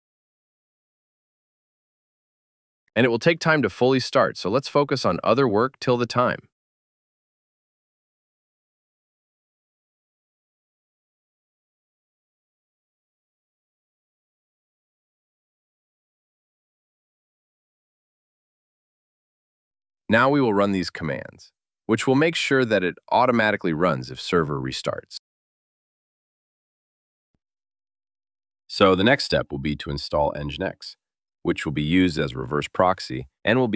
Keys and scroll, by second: 14.0 ctrl+c, 20.5 super+v, 27.0 super+v.